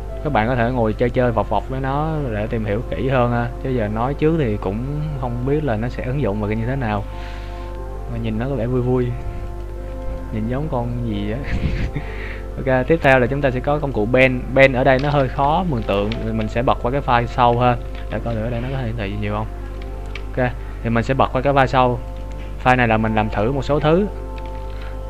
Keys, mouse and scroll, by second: 10.0 right click, 12.5-13.2 scroll down 4, 13.8 click, 15.4 Tab, 16.0 z, 16.8 right click, 17.2 z, 18.0 g, 20.7 ctrl+z, 22.4 click, 23.3 right click.